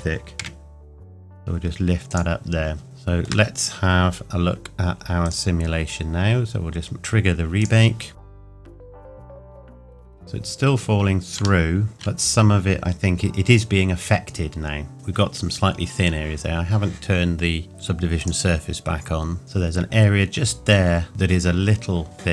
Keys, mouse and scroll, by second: 2.1 click, 2.8 shift+middle click, 5.2 click, 8.3 click, 10.1-10.9 scroll up 2, 10.9-11.3 scroll up 1, 11.6-12.0 shift+middle drag, 12.5-14.4 scroll up 2, 17.7 click.